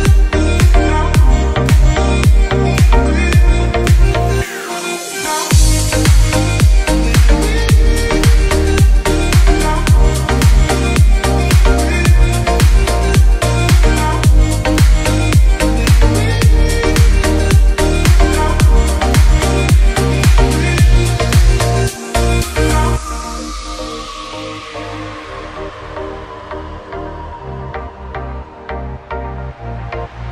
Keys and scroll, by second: 0.7 space, 1.7 F10, 4.0 space, 6.2 b, 6.7 Escape, 10.0 g, 16.0 space, 27.0 g, 28.3 space.